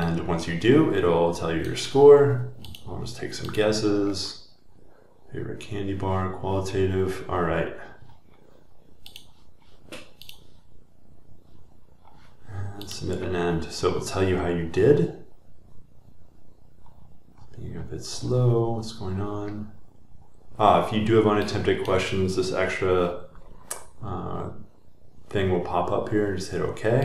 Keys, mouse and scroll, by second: 2.8 click, 6.3 scroll down 1, 8.1 scroll down 20, 9.2 scroll up 3, 10.3 click, 10.9 click, 10.9 middle click, 11.6-12.4 scroll, 12.4 middle click, 12.9 scroll, 15.6 scroll, 15.7 scroll down 1, 16.9-17.3 scroll, 17.8-18.2 scroll down 1, 18.8 scroll down 34.